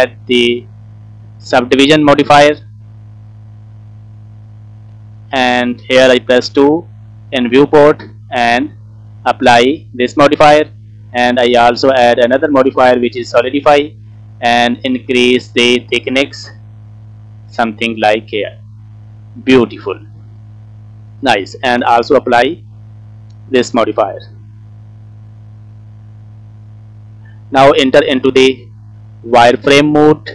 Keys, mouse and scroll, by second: 0.7-4.3 drag, 5.5-7.0 drag, 8.8-10.2 drag, 11.0-13.3 drag, 13.8 middle click, 16.9 click, 17.7 middle click, 18.2 scroll up 2, 18.4 scroll down 2, 18.5-20.2 middle drag, 20.4 scroll up 2, 20.8-22.2 scroll down 2, 20.9 middle click, 22.2-23.5 drag, 24.1 middle click, 25.1 shift+middle click, 25.5 middle click, 26.5-26.9 scroll up 1, 26.9 scroll down 1, 27.0 scroll down 1, 27.1 click, 27.1 middle click, 28.7 click, 29.2-29.7 scroll up 3, 29.7 scroll down 1, 29.9 middle click.